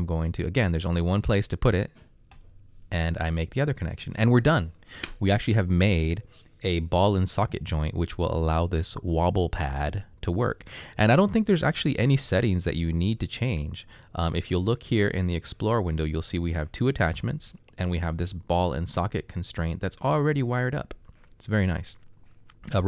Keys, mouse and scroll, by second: 2.2 click.